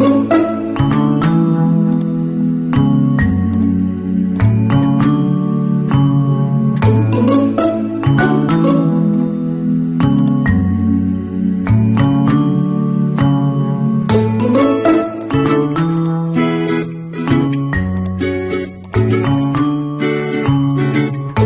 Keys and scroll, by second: 7.8 ctrl+t, 12.3 Return, 20.4 alt+BackSpace, 21.2 ctrl+f.